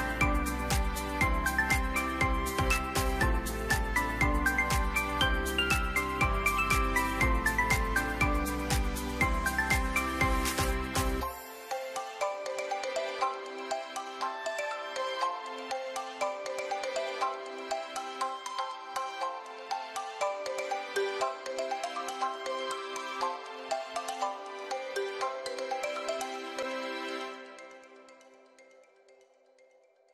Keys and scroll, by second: 1.2 typing, 2.6-3.4 typing, 10.5 ctrl+g, 13.0 Up, 13.0 Left, 18.8 ctrl+g, 20.8 Left, 21.0 Left, 21.2-21.6 Left, 21.8 Left, 21.9 Left, 22.0 Left, 22.2 Left, 22.3 Left, 22.7 Right, 25.0 ctrl+g, 27.0 ctrl+g.